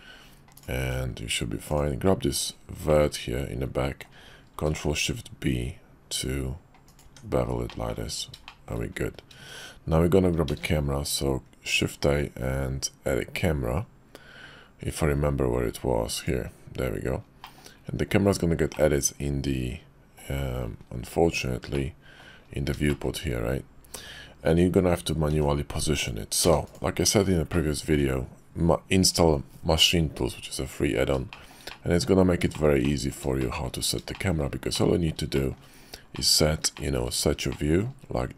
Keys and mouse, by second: 0.5 click, 0.8 Tab, 2.9-4.1 drag, 4.6 ctrl+shift+b, 7.0 Tab, 7.7 drag, 8.4 shift+drag, 10.5 shift+a, 17.4 click, 18.8-20.3 drag, 21.8-22.3 drag, 22.9 shift+click, 25.3 g, 26.4 x, 27.5-27.9 drag, 31.3 shift+drag, 31.7 click, 32.5 shift+click, 32.8 click, 33.4 shift+click, 34.1 shift+click, 34.7 middle click, 35.3 shift+middle click, 36.1 middle click, 36.7 shift+middle drag, 37.5 shift+click.